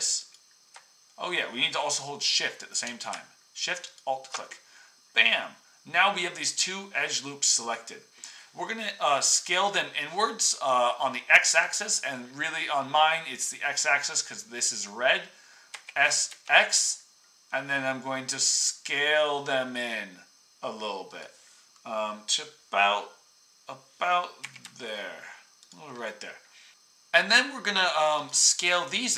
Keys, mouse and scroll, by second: 0.3-5.0 alt+drag, 5.2 middle click, 15.7 s, 24.4 s.